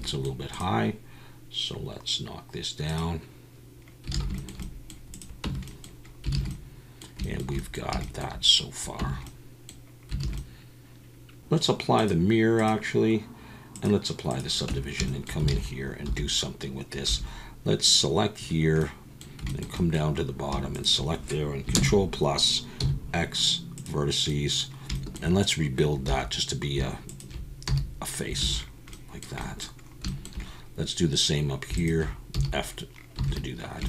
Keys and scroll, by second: 4.1 alt+a, 5.5 Tab, 6.3 alt+a, 9.0 Tab, 10.2 alt+a, 14.7 Tab, 15.5 alt+a, 16.0 2, 17.1 1, 21.7 ctrl+KP_Add, 22.8 x, 26.1 2, 27.7 f, 28.4 alt+a, 32.3 f, 33.2 alt+a.